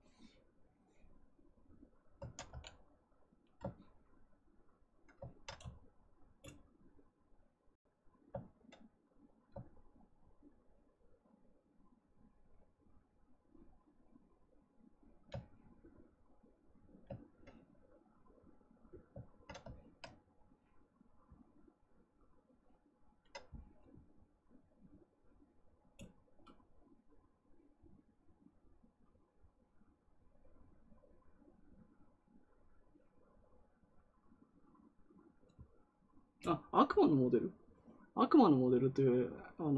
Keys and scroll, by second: 2.4 x.